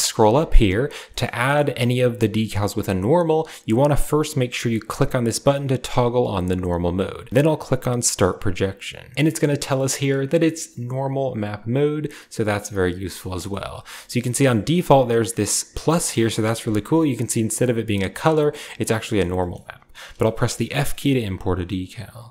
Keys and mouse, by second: 1.0 shift+click, 1.2 drag, 2.1 shift+click, 5.5 typing, 8.2 drag, 9.1-22.3 middle drag.